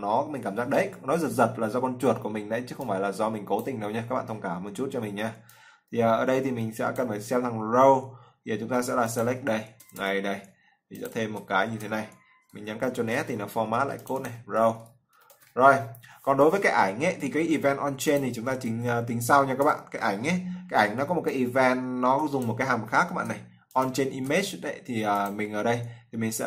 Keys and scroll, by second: 11.5 ctrl+v, 12.9 ctrl+s.